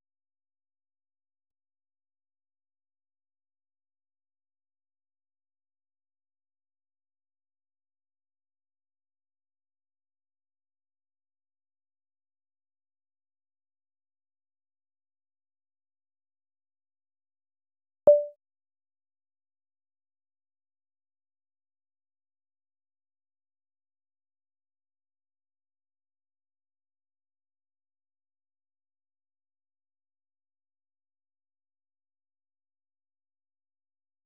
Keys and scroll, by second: 0.4-11.5 typing, 16.9-20.9 typing, 22.6-23.3 typing, 23.5 Return, 26.5 ctrl+n, 27.0 ctrl+n, 27.4 ctrl+n, 27.6 ctrl+n, 27.8 ctrl+n, 28.2 ctrl+n, 28.4 ctrl+n, 28.8 ctrl+n, 31.4 Return, 32.0-34.2 typing.